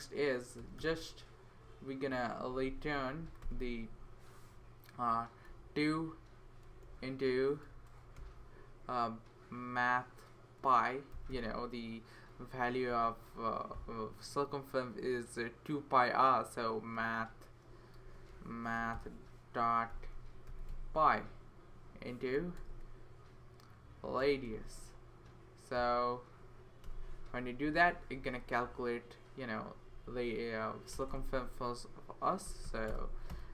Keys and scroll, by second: 0.0-1.3 typing, 2.5 Down, 2.7 Down, 3.1 Down, 3.4 Return, 5.4 typing, 6.6-8.4 typing, 10.9-14.6 typing, 17.0 a, 18.0-22.7 typing, 23.9-25.7 typing, 26.8 Return, 28.0 Right, 28.2 Right, 28.6 Tab, 29.7 Tab, 29.9 Tab, 30.1 Tab, 30.9 Return, 31.1 Return, 32.2-33.1 typing, 33.3 Return.